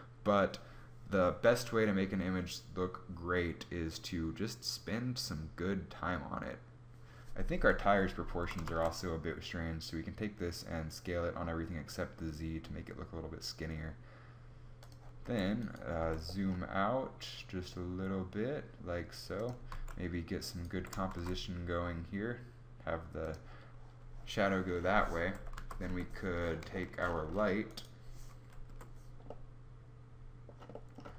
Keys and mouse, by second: 7.9 s, 9.0 s, 14.8 a, 15.1 a, 15.5 g, 15.5 g, 19.2 g, 20.3 g, 21.5 g, 24.7-26.1 typing, 27.2 KP_5, 28.2 KP_1, 30.8 g.